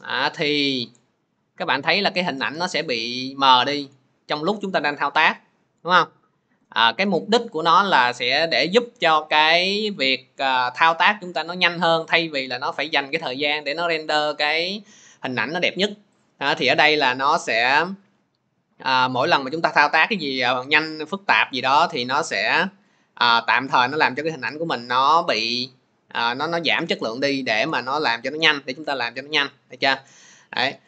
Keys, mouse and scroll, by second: 2.3-11.6 drag, 24.9-30.0 drag.